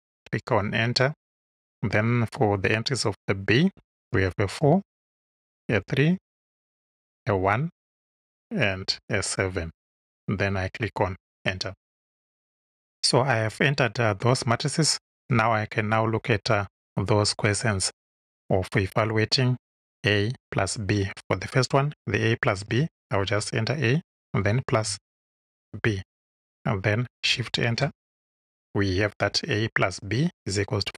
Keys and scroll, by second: 4.1 4, 4.6 Tab, 5.6 3, 6.1 Tab, 7.2 1, 7.8 Tab, 8.9 7, 11.1 Home, 23.2 shift+a, 24.2 shift+=, 24.7 shift+=, 25.7 shift+b, 27.6 shift+Return.